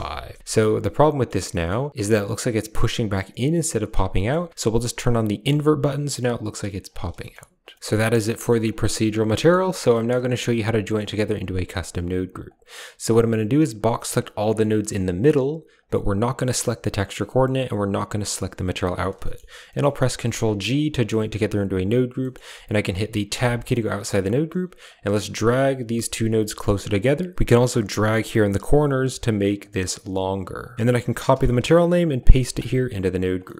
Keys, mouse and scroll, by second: 0.4-1.2 shift+middle drag, 1.5 shift+middle click, 4.0 middle click, 5.3 click, 7.1 shift+middle click, 7.6 shift+middle click, 8.2 middle click, 9.3 shift+middle drag, 9.8 shift+middle click, 10.7 middle click, 11.6 click, 12.3 click, 13.9-15.7 drag, 19.1 click, 19.5 click, 20.1 ctrl+g, 21.0 click, 22.1 click, 23.3 Tab, 24.7 click, 24.9 g, 26.2 click, 27.4 click, 27.9 click, 28.9 click, 29.7 click, 30.5 click, 31.2 ctrl+click, 32.1 ctrl+click, 32.8 click, 32.9 drag, 33.3 middle click.